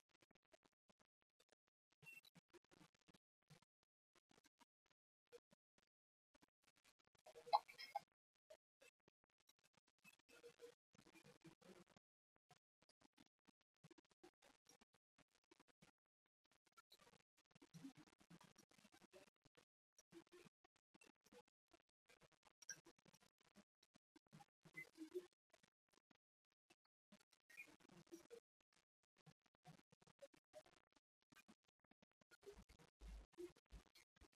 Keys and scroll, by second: 17.4 v, 19.6 ctrl+z, 20.6 ctrl+2, 22.1-23.8 typing, 24.7 Escape, 26.0 t, 27.5 ctrl+c, 29.2 Return, 30.0 ctrl+v, 30.3 ctrl+v, 31.2 ctrl+z, 31.8 Return, 32.1 ctrl+v, 32.6 Escape.